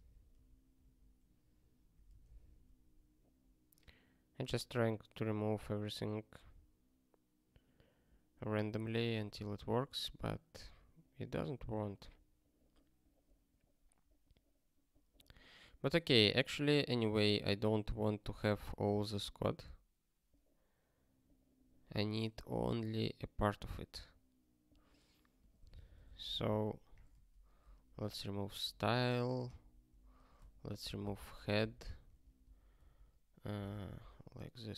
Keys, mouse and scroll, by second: 1.9 super+o, 2.5 ctrl+k, 9.1 q, 12.5 scroll, 13.9-14.3 scroll down 1, 16.6 scroll up 1, 18.2 scroll up 1, 19.0 scroll down 1, 33.6 super+o, 34.1 ctrl+k.